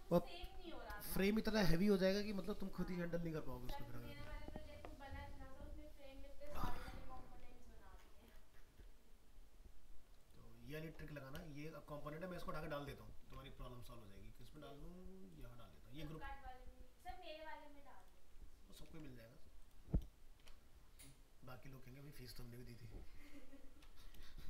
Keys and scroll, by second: 13.2 ctrl+c, 18.7 ctrl+-, 23.7 ctrl+z.